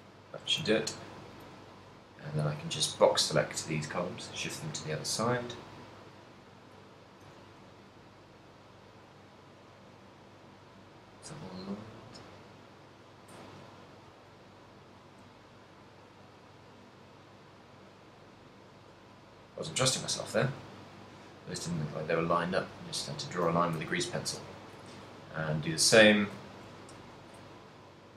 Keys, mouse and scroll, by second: 0.9 a, 1.2 b, 3.1 shift+d, 7.1 click, 7.8 g, 9.5 click, 15.2 click, 15.7-16.4 d, 16.6 click, 16.6 d, 16.8 d, 17.2 click, 19.3 d, 20.2 right click, 20.2-20.8 d, 21.2 right click, 21.2 d, 23.6 d, 24.2 a, 24.6 b, 26.9 b.